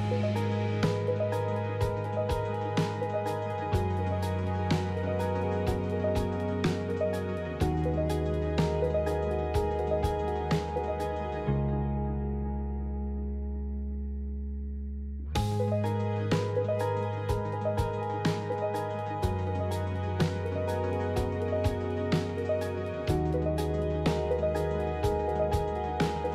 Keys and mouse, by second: 0.1 ctrl+r, 6.2 Tab, 7.0 middle click, 8.4 ctrl+middle click, 9.1 Tab, 9.4 middle click, 10.5 middle click, 11.7 Tab, 12.3 middle click, 13.3 Tab, 13.5 middle click, 18.2 Tab, 18.6 Tab, 19.2 middle click, 20.1-23.1 ctrl+z, 25.1 ctrl+r.